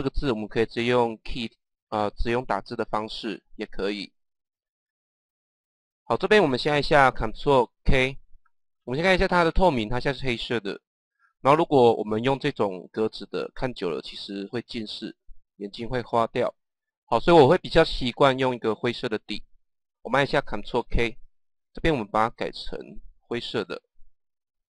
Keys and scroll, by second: 20.6 ctrl+k.